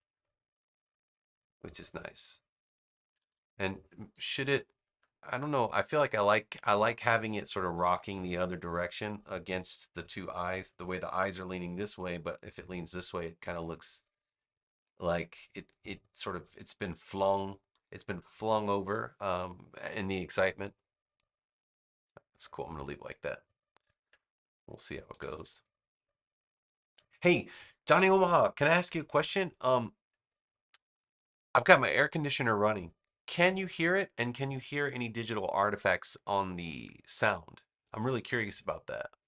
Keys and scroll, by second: 3.0 super+=, 25.0 super+-, 26.7 space, 29.5 space.